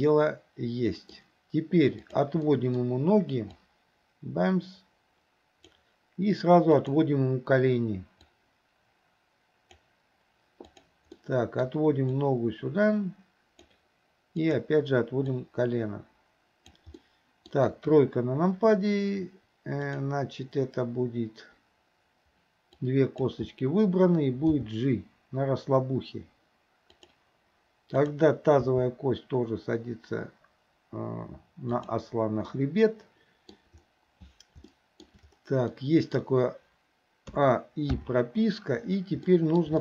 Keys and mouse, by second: 2.5 middle drag, 3.6-5.8 drag, 6.9 click, 8.3-9.9 drag, 10.8 click, 11.2 middle click, 12.3-13.7 drag, 15.4-16.8 drag, 17.0-17.6 middle drag, 17.7 KP_3, 19.9 click, 22.8-23.4 drag, 24.6 g, 28.1 click, 28.7 g, 32.6-33.6 middle drag, 34.8-35.1 shift+middle drag, 35.8 middle click, 37.4 a, 38.0 i, 39.3-39.7 middle drag.